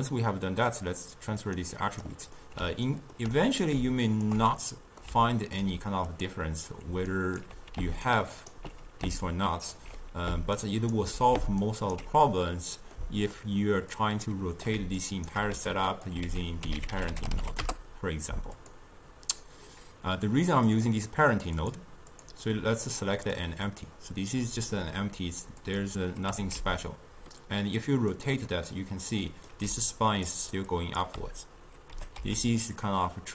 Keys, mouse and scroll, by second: 1.9 click, 2.5-4.2 middle drag, 4.2 alt+shift+click, 4.7-6.2 middle drag, 6.2 click, 7.2 ctrl+right click, 8.1 ctrl+alt+right click, 9.4 ctrl+alt+right click, 10.6 ctrl+alt+right click, 11.7 ctrl+alt+right click, 13.1-14.1 middle drag, 14.1 click, 15.1 shift+right click, 15.7 g, 16.4 ctrl+a, 20.8 click, 21.7 click, 22.2 click, 23.3 click, 23.8 click, 25.7 click, 26.4 r, 28.6-29.8 middle drag, 29.8-32.1 typing, 30.1 click, 30.5 click, 30.8 click.